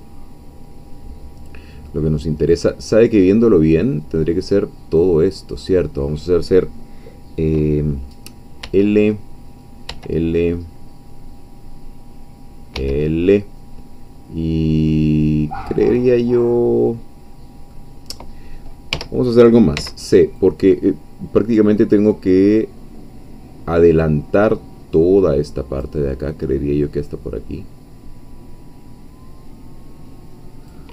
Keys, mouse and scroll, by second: 2.3-2.9 scroll down 2, 2.9-3.3 scroll up 2, 3.3-5.8 middle drag, 8.6 l, 12.8 l, 14.6 scroll down 2, 14.9-18.9 middle drag, 18.9 3, 19.8 c, 20.4-26.0 drag, 26.3-30.9 drag.